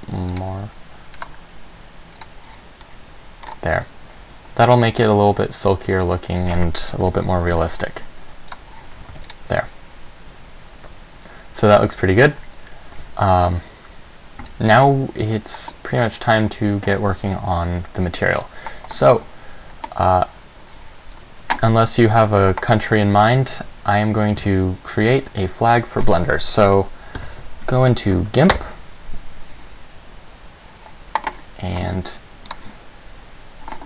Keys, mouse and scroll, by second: 0.5 click, 1.4 click, 2.4 click, 3.0 middle click, 3.6 scroll up 2, 4.8 middle click, 6.3 middle click, 7.3 KP_0, 8.7 click, 9.3 ctrl+s, 14.6 Escape.